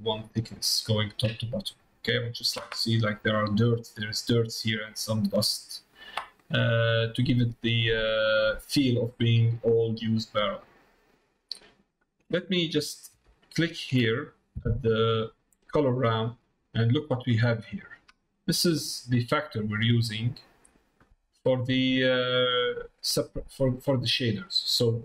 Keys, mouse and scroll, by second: 2.0 middle click, 6.7-7.9 middle drag, 8.4 middle click, 9.5 middle click, 10.5 middle click, 11.8 middle click, 13.4 ctrl+shift+click, 14.8 middle click, 16.2 middle click, 17.8 middle click, 18.4 middle click, 20.0 middle click, 21.1 middle click, 21.7 middle click, 22.3 middle click.